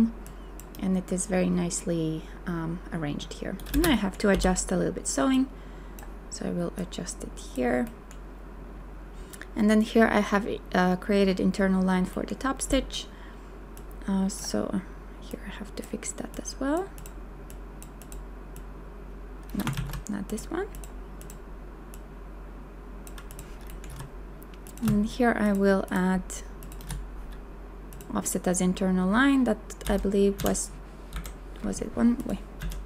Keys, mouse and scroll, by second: 3.7 space, 4.3 b, 19.7 ctrl+z, 25.4 shift+click, 25.9 shift+click, 26.6 shift+click, 26.8 right click, 29.9 shift+End, 30.4 Down.